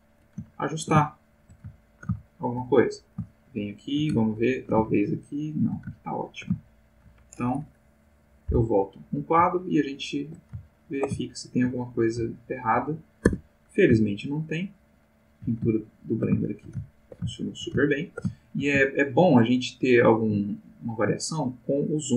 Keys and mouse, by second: 0.1 click, 0.5 ctrl+middle click, 1.0 ctrl+shift+middle click, 1.8 ctrl+shift+middle click, 3.3-4.4 shift+middle drag, 4.4-5.8 ctrl+shift+drag, 6.0-7.1 ctrl+shift+drag, 8.5 Left, 9.6-10.4 shift+middle drag, 10.6-11.8 ctrl+shift+middle drag, 12.3-12.8 shift+middle drag, 13.3 Tab, 14.0-15.5 shift+middle drag, 15.7 ctrl+shift+middle click, 16.5-18.3 ctrl+shift+middle drag, 18.4 ctrl+shift+middle click, 19.0-22.1 ctrl+shift+middle drag.